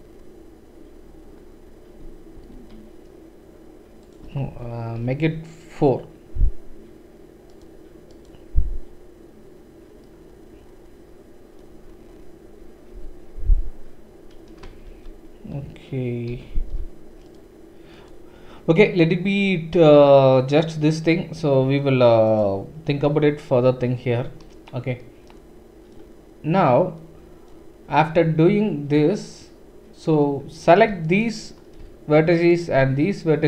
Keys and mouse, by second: 2.3 ctrl+r, 4.4 ctrl+z, 5.0 ctrl+r, 14.9 ctrl+z, 16.3 ctrl+r, 31.0 alt+click, 31.2 typing, 32.4 alt+shift+click.